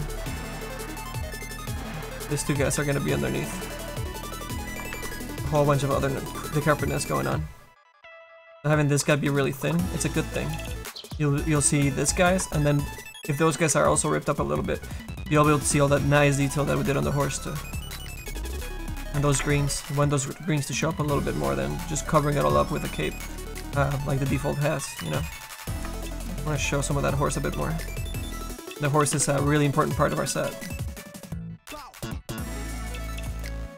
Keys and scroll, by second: 1.3 a, 2.7 a, 3.9 ctrl+z, 4.5 ctrl+z, 11.9 a, 12.2 ctrl+z, 13.7 a, 19.1 ctrl+z, 19.9 space, 23.9 a, 25.7 ctrl+z, 29.1 f.